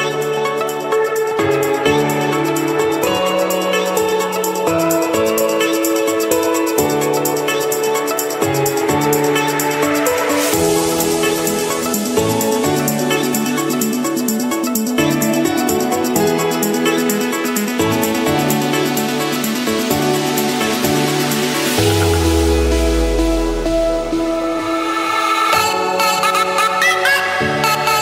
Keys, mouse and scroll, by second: 0.0-1.1 drag, 3.3-4.3 drag, 4.6-5.6 drag, 7.3-8.4 drag, 10.3-11.3 drag, 11.4 click, 12.9-13.9 drag, 15.3-16.3 drag, 17.8-18.8 drag, 19.1-20.1 drag, 21.6-22.6 drag, 23.3-24.3 drag, 25.6-26.6 drag, 27.0-28.0 drag.